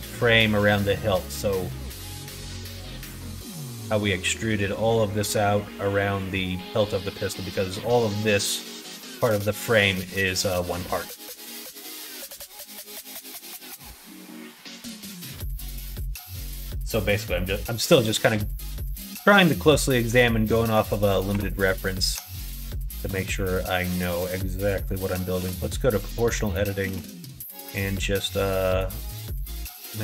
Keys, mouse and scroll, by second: 1.0 middle click, 1.7 middle click, 2.5 middle click, 3.5 middle click, 4.9 middle click, 5.9 middle click, 10.8 middle click, 11.6 shift+middle click, 18.0 middle click, 18.8 middle click, 19.1 Tab, 19.5 middle click, 21.3 3, 22.9 alt+shift+click, 23.2 middle click, 24.1 middle click, 25.3 o, 26.3 middle click, 26.8 s.